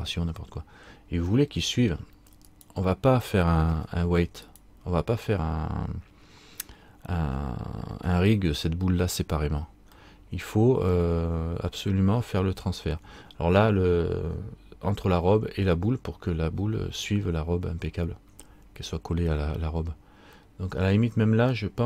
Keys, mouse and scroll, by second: 1.5 middle click, 2.6 right click, 3.9 Tab, 4.6 right click, 10.9 middle click, 12.2 scroll up 1, 13.3 scroll up 2, 20.6 middle click, 21.7 middle click.